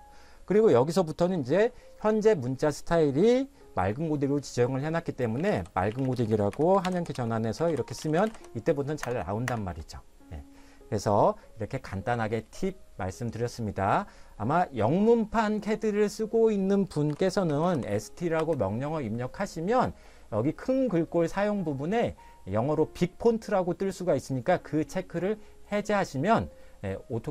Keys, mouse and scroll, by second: 5.1-8.9 typing, 9.0 Return, 9.5 Return, 17.5 s, 17.8 t, 18.4 space.